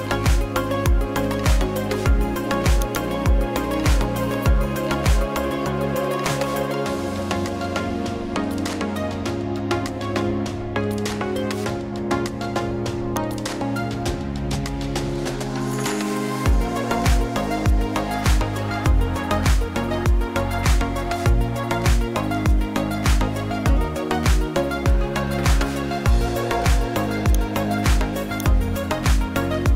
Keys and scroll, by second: 18.8-20.3 typing, 21.4-26.3 typing.